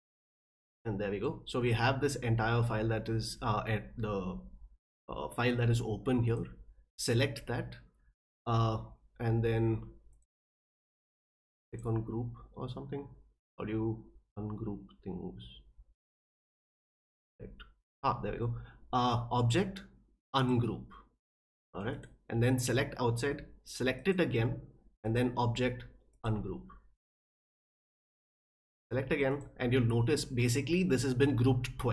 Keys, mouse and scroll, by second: 6.3 click, 10.1 click, 11.7 click, 17.0 click, 20.3 click, 21.9 click, 24.0 click, 25.0 click, 26.1 click, 28.3 click, 29.3 click, 30.4 click.